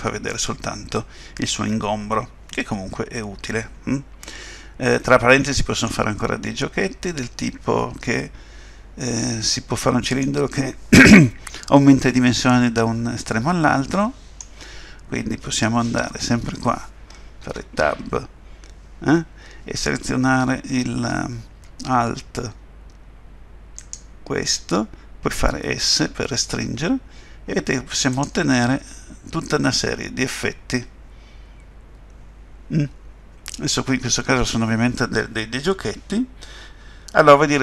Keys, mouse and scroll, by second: 0.3 middle click, 9.6 middle click, 12.8 middle click, 17.4 Tab, 23.8 alt+click, 25.4 s, 28.5 middle click, 31.2 typing.